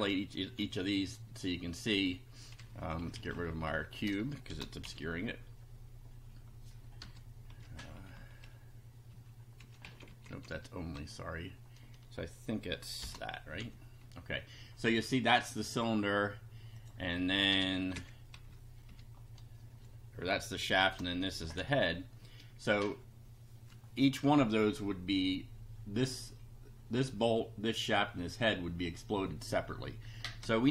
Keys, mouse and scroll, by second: 0.6 F5, 2.7 Down, 3.7 Home, 4.5 shift+1, 4.8 shift+F5, 7.0 BackSpace, 7.5 Down, 7.8 Right, 9.0 Right, 9.6 Up, 9.8 Left, 13.0 shift+8, 13.6 F5, 16.8 click, 17.5 BackSpace, 18.3 Down, 18.9 Up, 20.8 shift+3, 21.6 F5, 30.3 BackSpace.